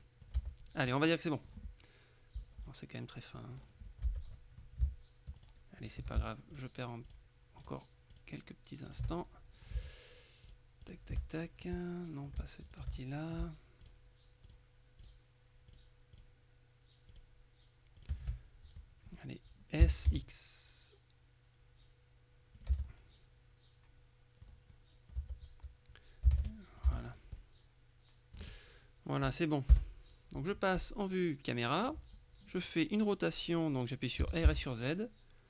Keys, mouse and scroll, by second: 0.4 Tab, 0.4 middle click, 1.0 middle click, 2.8 middle click, 4.1 Tab, 4.4 middle click, 5.5 shift+right click, 6.6 shift+right click, 9.0 right click, 9.2 middle click, 10.6 shift+right click, 11.2 shift+middle click, 11.8 shift+middle click, 12.8 shift+right click, 13.0 shift+middle click, 14.5 right click, 15.8 right click, 17.2 right click, 18.0 right click, 18.4 middle click, 19.6-20.6 typing, 22.6 click, 22.8 Tab, 23.0 middle click, 24.8 click, 26.4 s, 26.9 click, 26.9 x, 26.9 Tab, 27.2 scroll down 1, 27.5 middle click, 29.8 KP_0, 34.1-35.1 typing.